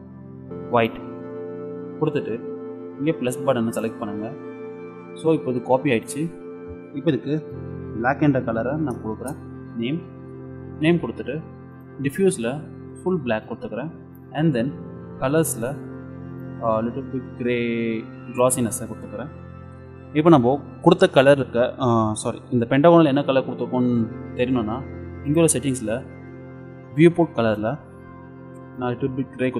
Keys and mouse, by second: 3.8-5.5 drag, 6.1-7.7 drag, 11.8-13.6 drag, 14.1-16.2 middle drag, 16.4-18.3 drag, 19.1-23.5 middle drag, 25.3-26.9 drag, 26.9 middle click, 27.5-29.2 drag.